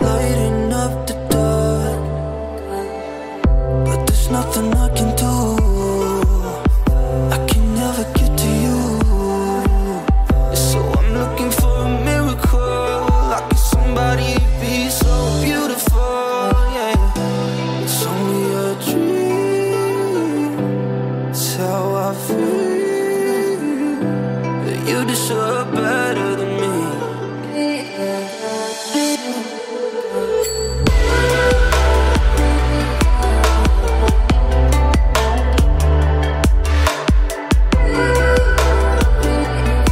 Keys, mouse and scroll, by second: 1.4 [, 1.6 [, 1.7-2.1 click, 2.1 [, 2.3-2.7 drag, 3.7-5.4 typing, 4.5 click, 5.0 click, 5.5 click, 15.6 click, 17.1 click, 23.0 right click, 23.9 click, 25.1-26.1 ], 26.3 ], 26.5 click, 27.4 [, 27.5 [, 27.6 click, 29.5-30.8 typing, 29.8 click, 30.7 click, 31.0 click, 35.7-37.0 typing, 36.1 click, 37.2 click, 39.1 [, 39.3 click.